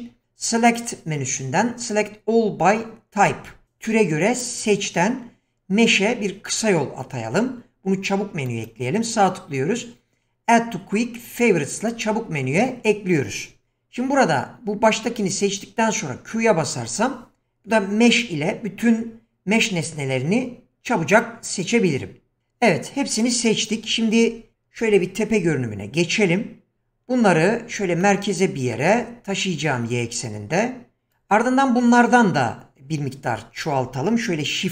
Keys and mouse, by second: 0.7-16.3 drag, 16.3 q, 24.8 KP_7, 27.7 g.